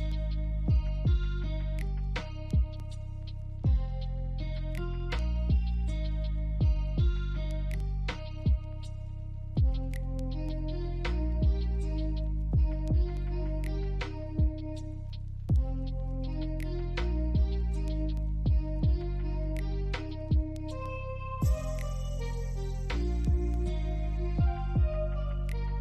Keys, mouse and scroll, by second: 2.9 double click, 3.2 scroll down 1, 3.8 middle click, 4.5 alt+click, 6.2 alt+scroll down 1, 6.5 alt+middle click, 6.9 alt+click, 8.0 BackSpace, 8.5 BackSpace, 9.8 scroll down 1, 10.4 alt+click, 12.5 scroll up 1, 16.2 right click, 18.2 alt+click, 19.2 double click, 20.4 BackSpace, 21.0-21.4 scroll down 1, 21.5 alt+click, 23.9 scroll down 1, 24.1 alt+middle click, 24.5 alt+click, 25.7 alt+click.